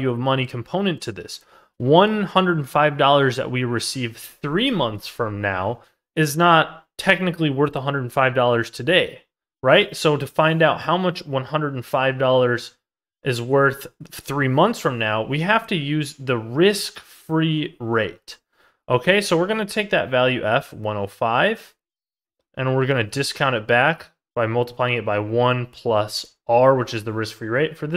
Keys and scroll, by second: 18.0 ctrl+z.